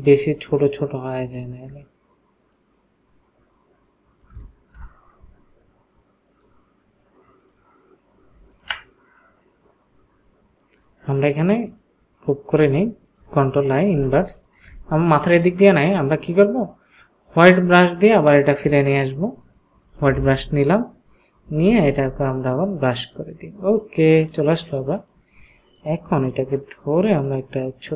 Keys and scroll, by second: 4.8 Return, 13.9 ctrl+i, 20.4 ], 21.9 ].